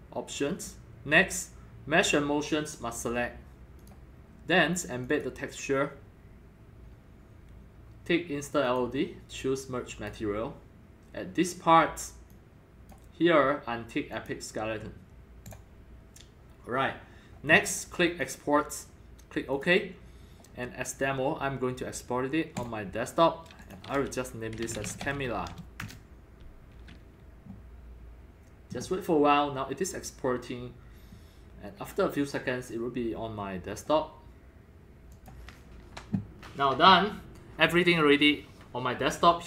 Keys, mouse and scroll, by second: 1.6-2.4 drag, 2.9 click, 3.0-3.4 drag, 3.8 click, 5.0 click, 8.6 click, 9.9 click, 12.3-12.9 drag, 14.1 click, 15.5 click, 18.2 click, 19.5 click, 21.5-24.6 drag, 24.3-25.6 typing, 25.8 shift+Return, 30.0 typing, 35.5-39.4 drag.